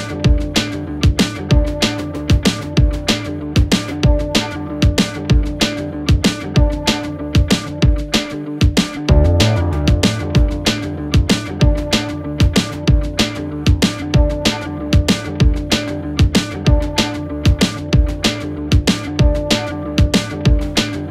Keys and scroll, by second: 0.5 Delete, 2.6 ], 6.3 ctrl+z, 7.1 ], 12.5 ], 15.3 ctrl+z, 16.1 ], 17.6 4, 17.9 3, 18.1 ], 18.7 4.